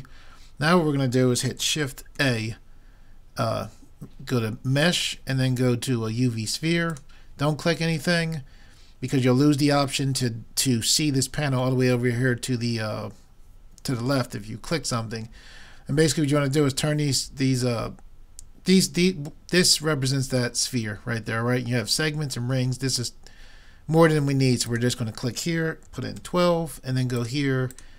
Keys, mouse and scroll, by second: 2.2 shift+a, 24.7-26.6 drag, 27.8-27.9 drag.